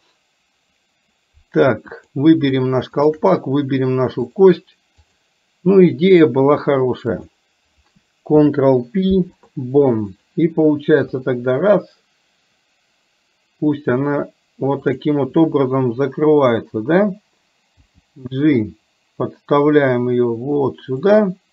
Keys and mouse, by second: 2.2 click, 3.0 shift+click, 4.3-5.4 drag, 8.5 ctrl+p, 11.3 r, 17.9 g.